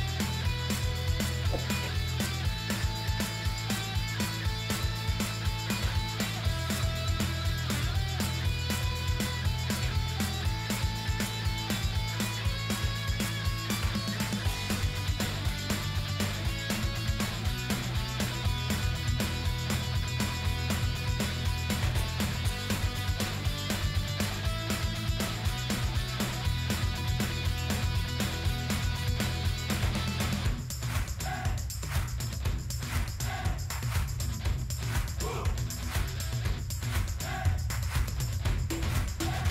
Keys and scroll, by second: 28.3 ctrl+t.